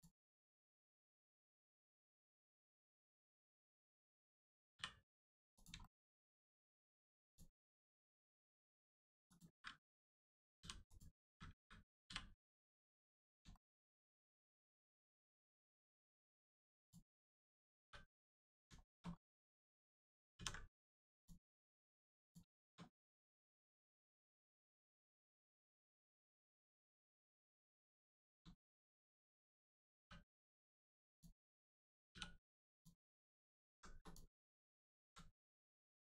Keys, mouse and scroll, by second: 0.2 middle click, 0.8 scroll up 1, 1.0 middle click, 2.3-2.6 scroll down 1, 2.6 middle click, 3.5 Tab, 4.1 middle click, 5.1 middle click, 5.5 click, 5.7 shift+middle click, 6.0 middle click, 6.1 middle click, 6.3 scroll down 1, 7.2 click, 10.5 h, 10.8 click, 12.5 middle click, 12.7 Tab, 13.1 middle click, 13.5 shift+middle click, 13.9 middle click, 13.9 middle click, 15.7 shift+middle click, 15.9 middle click, 16.0 middle click, 16.3 scroll up 1, 16.7 click, 17.3-17.7 scroll up 1, 17.7 3, 18.4 click, 18.7 shift+middle click, 19.1 scroll up 1, 19.5 middle click, 20.3 ctrl+e, 21.1 click, 21.4 scroll down 1, 22.2 click, 22.5 shift+click, 22.8 middle click, 22.9 middle click, 27.6 middle click, 28.5 shift+middle click, 29.2 middle click, 29.3 middle click, 29.9 3, 30.3 click, 32.7 click, 33.2 alt+shift+click, 33.9 shift+click, 34.0 click, 34.4 alt+click, 35.3 middle click.